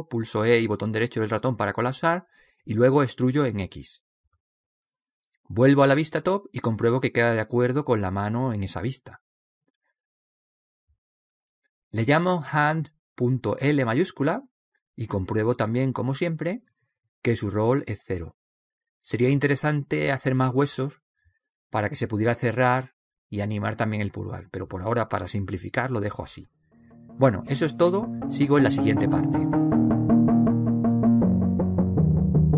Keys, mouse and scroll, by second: 0.0 KP_1, 1.2 right click, 2.4 e, 2.8 middle click, 3.9-5.7 drag, 7.6 KP_7, 9.0-10.6 middle drag, 11.1 click, 13.4-15.2 right drag, 14.3 click, 15.4 click, 16.0 right click.